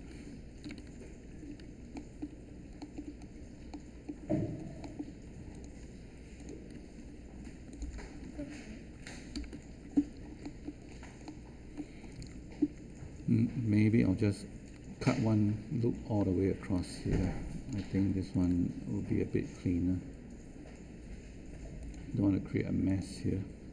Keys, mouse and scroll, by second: 0.6 ctrl+Delete, 9.3 ctrl+Delete.